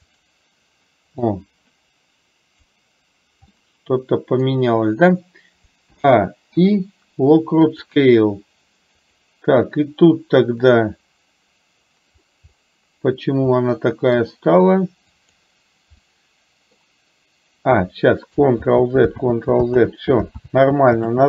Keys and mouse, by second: 1.4-2.7 drag, 3.6-4.6 middle drag, 6.0 a, 9.1 click, 12.6-13.1 middle drag, 13.7-14.2 middle drag, 16.1-16.9 middle drag, 18.7 ctrl+z, 19.4 ctrl+z, 20.5 ctrl+z.